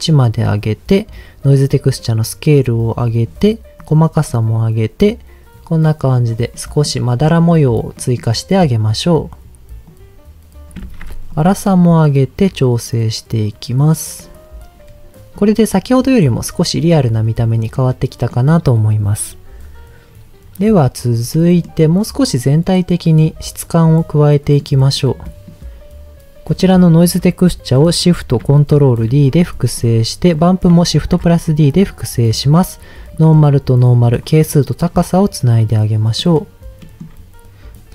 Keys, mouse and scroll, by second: 1.5-3.3 drag, 3.8 click, 5.0-6.1 drag, 6.5 middle click, 7.2 middle click, 7.9 middle click, 9.9 click, 10.8 ctrl+z, 11.3-14.2 drag, 15.3-17.4 drag, 17.7 middle click, 21.3 middle click, 24.3 middle click, 25.2 middle click, 26.4 click, 29.1 ctrl+shift+d, 29.8 click, 30.3 click, 31.0 shift+d, 31.8 click, 32.3 click, 33.8 click, 34.9 click, 36.2 middle click, 36.8 middle click, 37.0-37.4 scroll up 2.